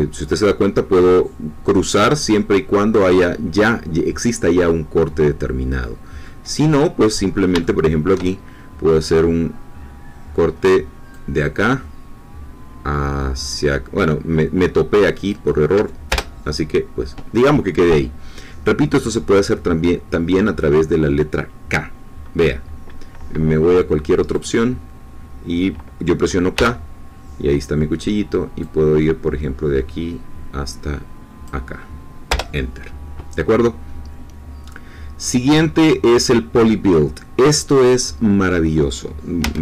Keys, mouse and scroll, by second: 5.8 scroll down 2, 6.2-7.3 middle drag, 7.3 scroll up 3, 7.6-8.6 shift+middle drag, 11.1-15.5 drag, 16.1 Return, 20.3-20.7 scroll up 2, 20.7 scroll down 2, 24.3 click, 26.5 k, 28.6-31.6 drag, 32.8 Return, 37.6-38.3 scroll down 2, 38.3 middle click, 39.4 a.